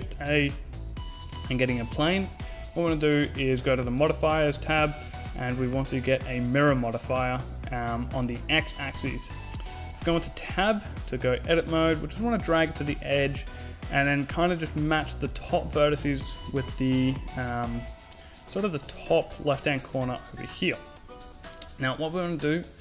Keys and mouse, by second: 0.8 shift+a, 4.5-7.1 drag, 11.1 Tab, 12.3-13.6 drag, 16.3-17.5 right drag, 17.5 click, 17.7-19.3 right drag.